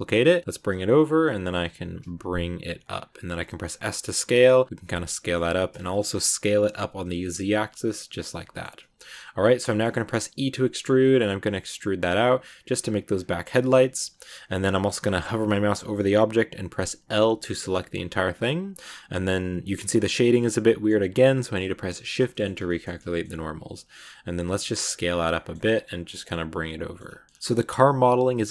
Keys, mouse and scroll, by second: 1.1 middle click, 1.6 g, 4.3 scroll up 1, 4.4 middle click, 4.7 g, 5.0-6.0 middle drag, 6.0 s, 8.2 middle click, 8.7 g, 9.5 shift+middle click, 10.0 e, 13.3-21.9 middle drag, 21.9 shift+n, 22.0-23.4 middle drag, 23.4 s, 25.2 middle click, 25.5 g, 26.2 middle click, 26.9 g, 27.2 scroll up 1, 27.4-28.5 middle drag.